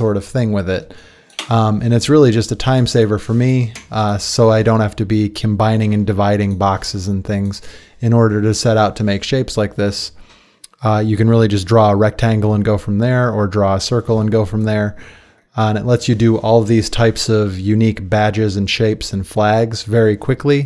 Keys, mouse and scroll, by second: 0.0 Escape, 0.8 `, 3.7 Delete.